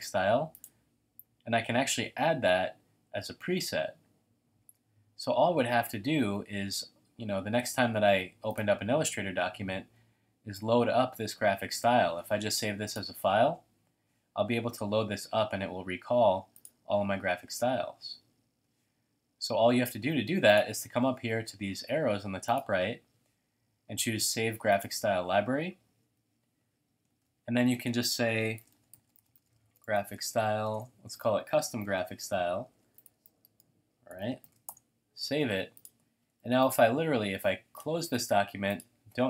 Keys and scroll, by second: 28.3-31.0 typing, 31.1 alt+Left, 32.5-34.9 typing, 36.4 super+w.